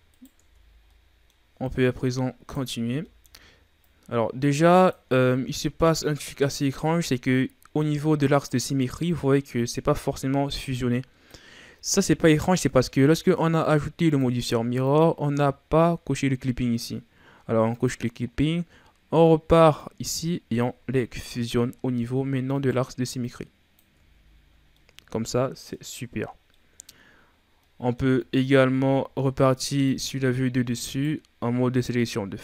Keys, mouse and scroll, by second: 0.1 right click, 0.4 Tab, 0.9 middle click, 1.7 right click, 2.7 ctrl+z, 3.0 middle click, 3.8-5.2 drag, 5.2 ctrl+z, 5.6-6.6 middle drag, 6.6-7.7 scroll up 1, 7.7-12.6 drag, 14.0-17.8 drag, 19.8-21.1 drag, 21.1 right click, 22.5 right click, 23.2 click, 24.0 Tab, 24.4-24.7 scroll down 1, 24.7-26.2 middle drag, 26.2-26.5 scroll down 3, 26.5-27.1 middle drag, 27.1-27.6 scroll up 1, 27.6-28.2 middle drag, 28.2 Tab, 28.7 ctrl+Tab, 30.8 right click, 31.8-32.4 drag.